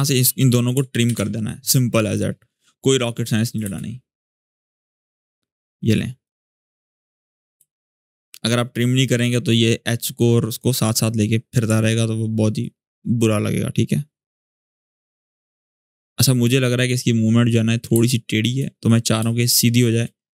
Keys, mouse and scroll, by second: 0.8 alt+[, 1.8 click, 3.4 space, 6.7 click, 7.3 space, 8.6-10.5 drag, 11.5 alt+scroll up 2, 12.3-16.4 drag, 17.3-17.7 scroll up 1, 17.8-18.5 click, 18.2 space, 18.4 scroll up 1, 18.9 space, 19.3 click, 19.4 space.